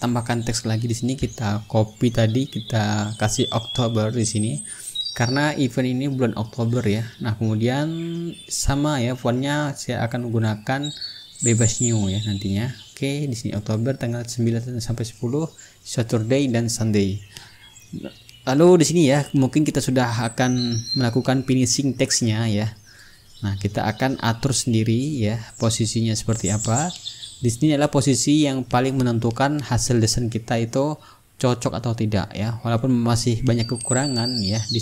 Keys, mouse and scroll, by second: 0.5 click, 2.6-4.4 typing, 4.9 ctrl+a, 5.8 click, 6.6 KP_1, 6.9 KP_2, 7.1 KP_0, 7.3 Return, 8.9-13.3 drag, 11.2 right click, 13.9-16.3 drag, 17.3 click, 20.1 t, 20.9 ctrl+a, 21.3 click, 22.0 KP_8, 22.3 KP_0, 22.6 Return, 24.9-27.6 drag, 26.6 t, 27.4 ctrl+a, 27.7 ctrl+click, 28.5 KP_7, 28.9 KP_0, 29.2 Return, 30.7 click, 31.7-34.8 drag.